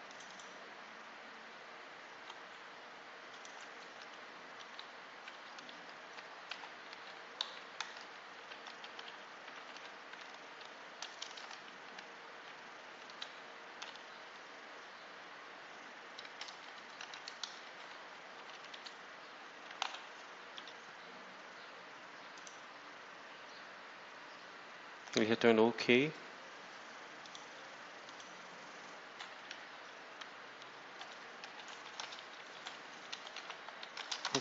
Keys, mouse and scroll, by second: 0.0 click, 3.2 click, 4.5 shift+End, 4.7 shift+Left, 6.4 ctrl+c, 6.8 ctrl+Up, 7.3 ctrl+Left, 7.7 ctrl+v, 8.2 ctrl+End, 9.5 ', 10.5 shift+;, 11.1 Return, 11.7 Delete, 13.0 End, 13.1 Left, 14.1 Left, 16.1 Right, 16.4 Left, 16.9 shift+End, 17.0 shift+Left, 17.6 shift+Right, 17.9 shift+Delete, 18.3-20.2 typing, 18.6 shift+Left, 20.5 F5, 22.2 click, 25.1 click, 27.1 click, 28.0 scroll up 1, 29.4 Home, 31.1-34.4 typing.